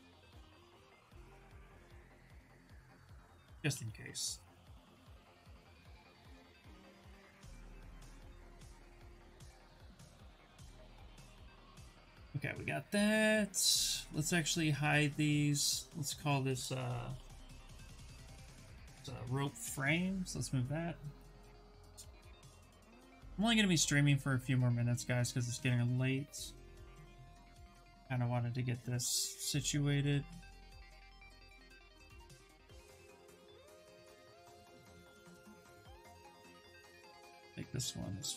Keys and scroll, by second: 4.2 ctrl+z, 4.7 ctrl+z, 5.2 ctrl+z, 5.5 ctrl+z, 6.0 ctrl+z, 6.2 ctrl+z, 6.9 ctrl+shift+z, 7.0 ctrl+shift+z, 7.2 ctrl+shift+z, 7.7 ctrl+z, 16.7-18.4 typing, 20.9-22.5 typing, 26.7 shift+f, 28.0 c, 33.7 b, 36.5 c.